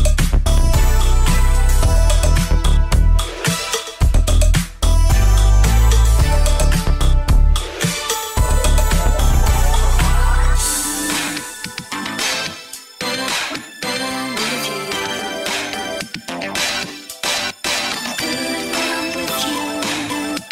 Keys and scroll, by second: 0.7 ctrl+KP_1, 6.5 ctrl+KP_1, 6.7 ctrl+KP_1, 7.2 Tab, 7.5 ctrl+KP_1, 8.3 ctrl+KP_1, 8.8 ctrl+KP_1, 11.0 ctrl+KP_1, 12.5 ctrl+KP_1, 12.9 ctrl+c, 17.4 shift+., 18.8 Tab, 19.3-20.5 typing.